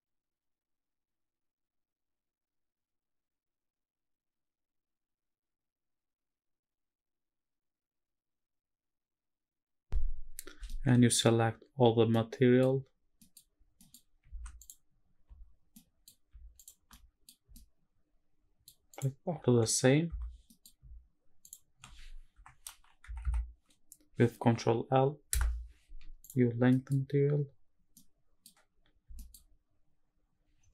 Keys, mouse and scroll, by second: 0.2 middle drag, 0.6 g, 0.9 shift+z, 1.5 click, 2.1 x, 2.7 scroll up 2, 3.0 middle click, 3.3 scroll up 1, 3.5 click, 4.7-6.1 drag, 7.3 scroll down 1, 7.6 middle click, 8.1 shift+middle click, 10.7 middle click, 12.1 middle click, 13.2 scroll down 1, 13.2 middle click, 13.8 middle click, 13.8 scroll down 1, 14.4 ctrl+s, 14.6 click, 15.3 middle click, 15.3 click, 15.3-15.8 scroll up 3, 15.8 middle drag, 16.6 shift+click, 16.9-17.3 middle drag, 17.5-18.0 shift+middle drag, 18.4 shift+middle click, 18.9 shift+click, 19.6 g, 20.1 g, 20.3 scroll down 1, 20.5 middle click, 21.4 shift+click, 22.3 ctrl+l, 23.2 Down, 26.2 click, 26.5 scroll down 3, 26.7 middle click, 27.1 scroll up 2, 27.9 middle click, 27.9 scroll down 1, 28.5 scroll up 1, 29.2 shift+middle click, 29.5 scroll up 1, 30.5-30.7 scroll down 3.